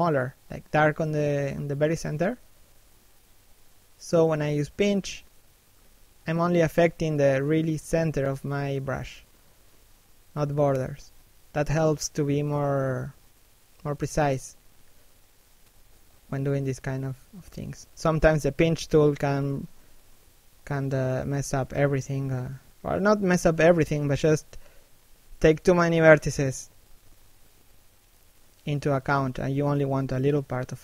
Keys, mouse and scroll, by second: 0.0 f, 0.3 click, 0.6 scroll up 1, 0.9 scroll down 1, 1.2 click, 6.6 middle click, 6.9 middle click, 8.2 shift+middle click, 8.6 middle click, 9.2-9.6 scroll up 1, 9.6 click, 15.4-15.9 scroll down 1, 15.9 middle click, 16.5 shift+middle click, 19.2 f, 19.5 click, 23.3-23.9 scroll up 1, 25.0 f, 25.6 right click, 30.0 f, 30.5 right click.